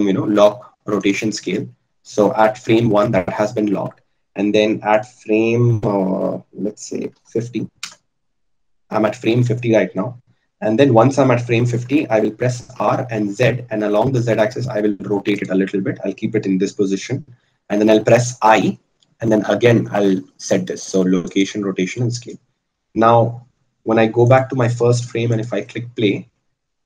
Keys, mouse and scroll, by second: 12.6 r, 19.5 i, 24.7-26.8 drag.